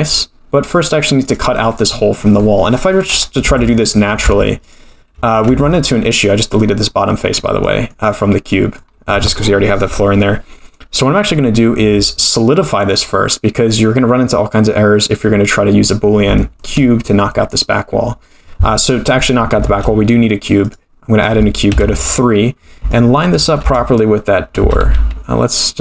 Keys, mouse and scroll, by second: 1.2 click, 1.7-2.9 scroll down 1, 2.9-3.4 scroll down 3, 3.4 Tab, 3.8 click, 4.2 x, 5.5 Tab, 5.7-6.6 middle drag, 6.9-7.6 scroll up 6, 7.6 middle drag, 8.0-8.5 scroll down 5, 8.5 middle drag, 14.4-15.2 scroll up 2, 15.2-16.2 scroll down 4, 15.7-16.2 scroll up 1, 16.2 scroll up 1, 16.4-16.7 shift+middle drag, 17.0 middle click, 19.6 shift+a, 21.7 KP_3, 22.6-23.3 scroll up 4, 22.9 shift+middle drag, 23.6 Tab, 24.6 g.